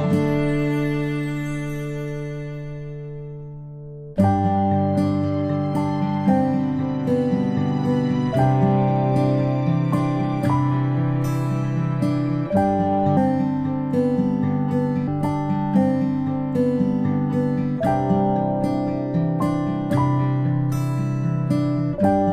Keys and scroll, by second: 6.4 ctrl+p, 14.8 ctrl+a, 17.7-18.5 typing.